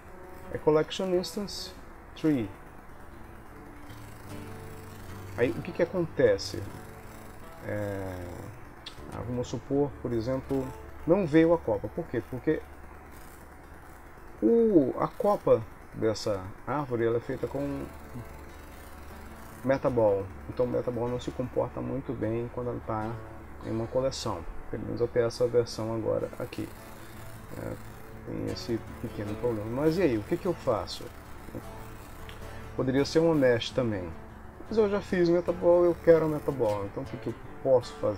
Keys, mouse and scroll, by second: 3.8 g, 8.7 g, 11.7 ctrl+z, 13.9 click, 15.8 click, 17.7 g, 23.1 ctrl+s, 26.2 middle click, 28.1 middle click, 29.1 click, 32.6 middle click, 32.6 g, 33.3 KP_1.